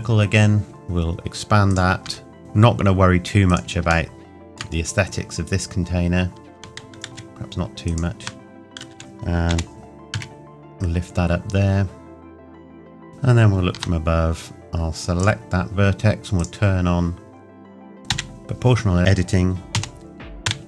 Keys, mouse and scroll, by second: 0.6 s, 1.7 click, 2.1 Tab, 3.5 click, 4.1 shift+middle click, 6.5 Tab, 7.9 click, 8.2 Tab, 9.0 click, 9.5 g, 12.2 s, 12.3 click, 12.4 shift+middle click, 12.5 g, 12.7 alt+click, 12.7 s, 12.8 ctrl+KP_Add, 12.9 shift+Tab, 13.1 KP_7, 13.4-13.7 scroll down 1, 13.7 Tab, 15.1 click, 18.1 o.